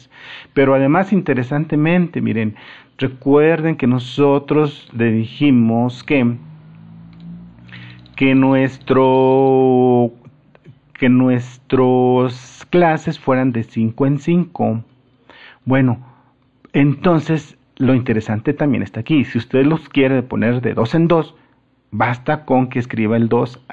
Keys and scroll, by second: 3.7 Escape, 14.0 ctrl+z, 14.9 ctrl+z, 15.7 ctrl+z.